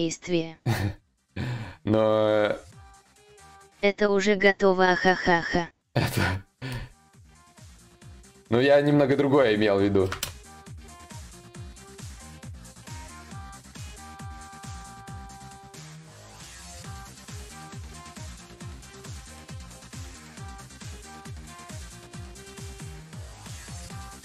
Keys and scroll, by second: 11.8 ctrl+z, 11.8 y, 16.2 ctrl+z, 20.2 ctrl+z.